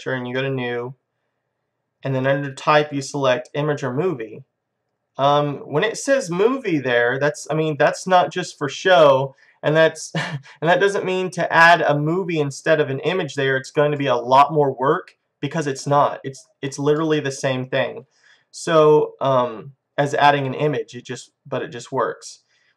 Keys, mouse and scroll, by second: 2.6-4.4 drag, 9.6-11.3 drag, 14.0-15.7 middle drag, 17.3-20.5 middle drag, 20.5-22.7 drag.